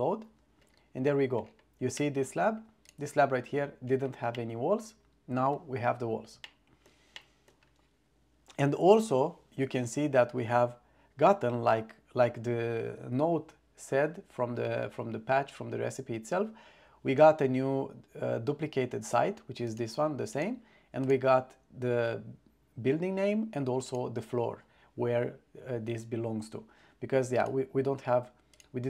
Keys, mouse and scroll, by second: 2.1-2.5 drag, 2.9 click, 4.4-5.6 middle drag, 6.6 shift+middle click, 7.3-7.6 middle drag, 19.8 click, 20.4 click, 24.0 click, 27.5 click, 28.6 click.